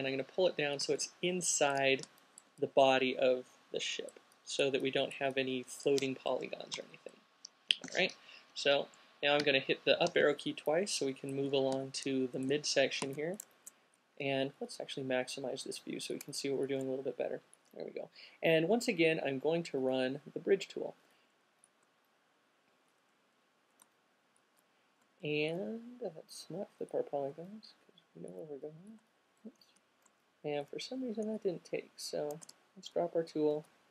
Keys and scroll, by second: 8.1 alt+q, 8.7 Left, 9.6 Left, 13.8 0, 29.9 alt+super+z, 32.7 q, 33.8 space.